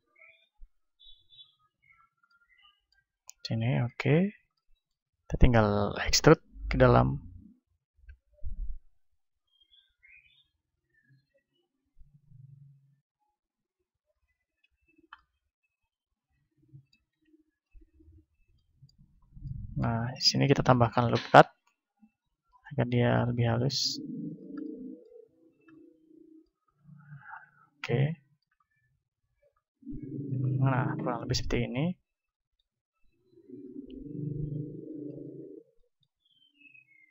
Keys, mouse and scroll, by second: 0.5-2.1 right drag, 2.1-6.1 middle drag, 6.1 e, 13.9-16.0 drag, 14.6 Tab, 16.0-21.3 middle drag, 17.0 Tab, 17.6 Tab, 17.9 Tab, 19.0 a, 20.5 ctrl+r, 22.7-25.9 drag, 23.3 s, 24.6-25.6 middle drag, 25.3 Tab, 25.9-34.8 middle drag, 27.3 KP_1, 31.5 a, 34.8-37.1 right drag, 35.1 Tab, 35.7-37.1 drag.